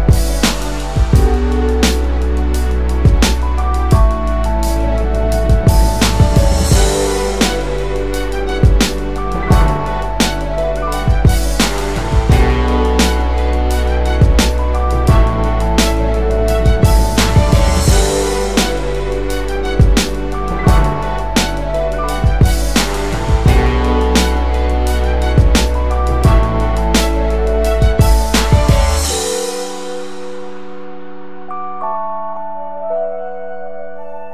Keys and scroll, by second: 1.4 space, 4.7 space, 14.1 5, 16.2 Delete, 17.5 ctrl+space, 17.7 ctrl+space, 17.8-20.7 ctrl+space, 18.9 space, 21.1-21.6 typing, 26.0 shift+space, 27.4 a, 30.7 ctrl+space, 32.5 space.